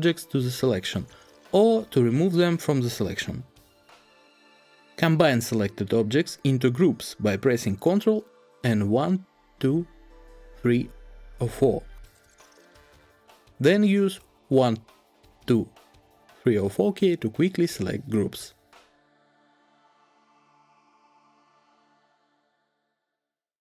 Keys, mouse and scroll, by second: 8.8 ctrl+1, 9.4 ctrl+2, 10.0 ctrl+2, 10.4 ctrl+3, 11.0 ctrl+3, 11.2 ctrl+4, 12.4 ctrl+4, 14.3-17.1 typing.